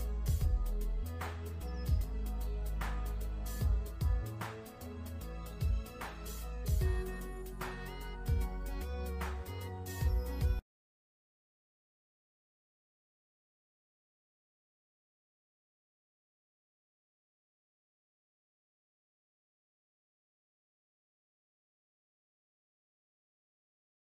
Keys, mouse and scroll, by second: 3.0 v, 4.0 click, 8.6 click, 13.9 z, 14.8 click, 20.2 click.